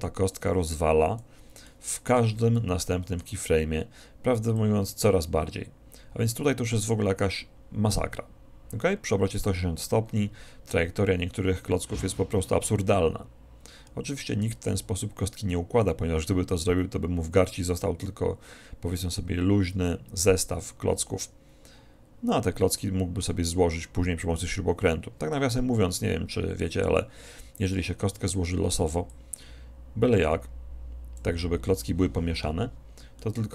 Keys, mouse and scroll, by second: 1.8-4.3 middle drag, 4.6-6.4 drag, 29.2-31.0 drag, 33.2-33.5 middle drag.